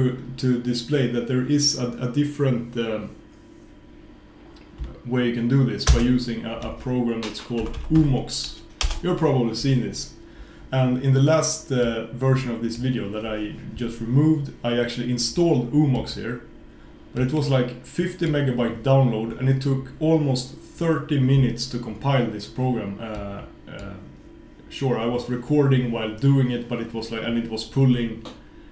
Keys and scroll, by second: 6.0 super+space.